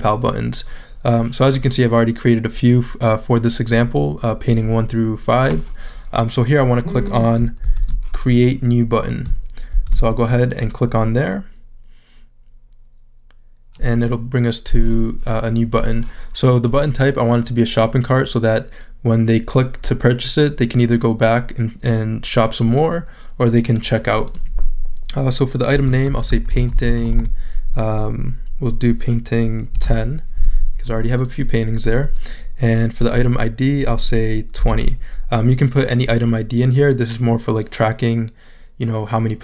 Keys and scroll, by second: 25.8-27.5 typing, 29.5-30.3 typing, 34.3-35.2 typing.